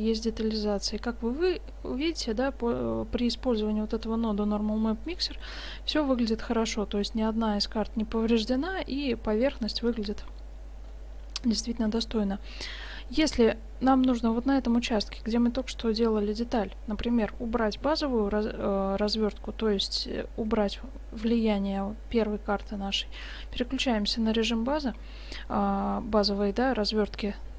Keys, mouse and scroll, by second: 0.3-2.2 middle drag, 5.2-7.1 middle drag, 7.3-9.1 middle drag, 10.5 middle click, 12.0 shift+z, 12.5-13.1 drag, 14.6-15.7 drag, 15.1 Tab, 23.2-25.2 drag.